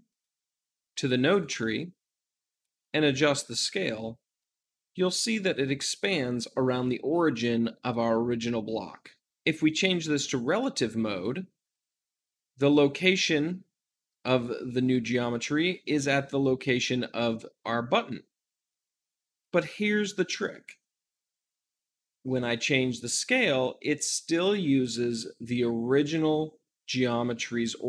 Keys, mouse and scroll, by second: 0.0-9.3 drag, 10.3-27.8 drag.